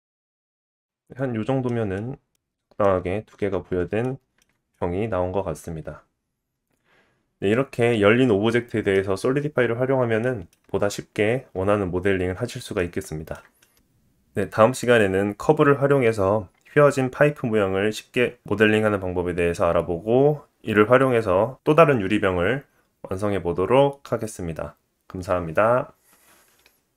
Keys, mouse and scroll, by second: 0.6 middle click, 1.2-1.6 scroll up 1, 1.6 scroll down 1, 2.0 middle click, 3.0 scroll down 2, 4.0 shift+middle click, 4.7 middle click, 10.2 shift+middle click, 13.3 shift+middle click, 13.6 click, 14.2 click, 26.2 click, 26.6 click.